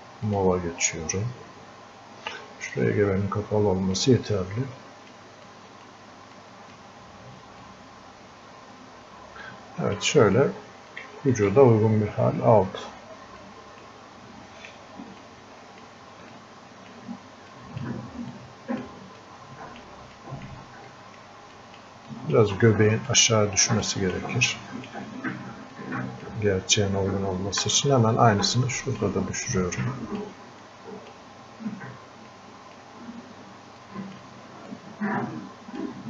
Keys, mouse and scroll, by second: 2.7-5.5 drag, 5.5 click, 6.4 click, 7.7-10.3 drag, 10.3-10.9 scroll up 1, 10.9 click, 11.3-13.5 shift+drag, 13.5 click, 14.6 right click, 15.3 click, 16.3 click, 17.5 click, 19.2 click, 20.2-25.8 drag, 25.8-27.7 drag, 27.7 alt+click, 28.7 click, 29.7 click, 30.7-32.4 drag, 32.4-33.9 drag, 33.9 click, 34.7-36.0 drag.